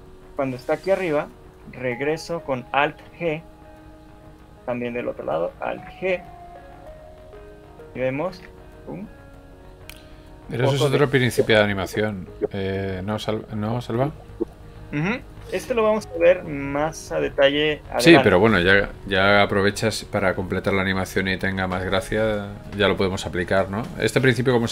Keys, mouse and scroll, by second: 1.8 click, 3.0 alt+g, 5.2 right click, 5.6 alt+g, 6.8 right click, 8.4 alt+a, 9.1 scroll down 5, 11.4 middle click, 15.7 Escape, 16.0 scroll up 2, 16.2 shift+middle click, 16.7 middle click, 19.0 shift+middle click, 20.1 middle click, 20.3 alt+a, 21.7 scroll down 1, 22.5 Escape, 23.4 KP_3.